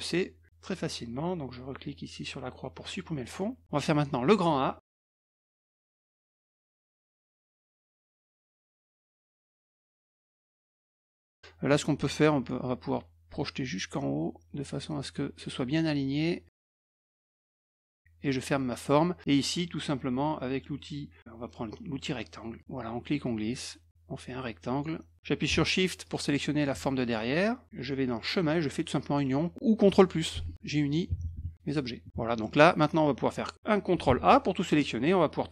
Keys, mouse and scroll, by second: 0.1 click, 2.8 click, 3.4 middle click, 5.4 click, 6.7 click, 6.9 middle click, 9.1 click, 15.0 click, 16.6 click, 18.2 click, 18.5 middle click, 22.6 click, 23.2-24.8 drag, 26.0 shift+click, 28.2 click, 32.7 middle click, 34.0 ctrl+a.